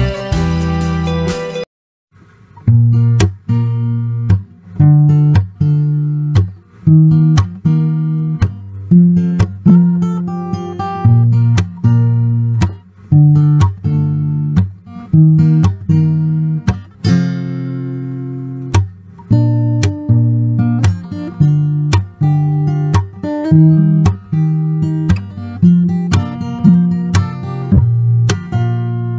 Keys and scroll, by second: 0.6 Escape, 2.4 Escape, 2.5 Escape, 2.6 Escape, 2.7 Escape, 2.8-3.8 typing, 4.6 Escape, 4.7 Escape, 4.8 Escape, 7.0 Escape, 9.2 Escape, 9.3 Escape, 10.6 Escape, 11.9 Escape, 14.2 Escape, 14.6 Escape, 15.4 e, 15.5 space, 19.4 m, 19.4 space, 21.6-22.6 typing, 25.9 ctrl+z, 26.2 ctrl+z, 28.9 Escape.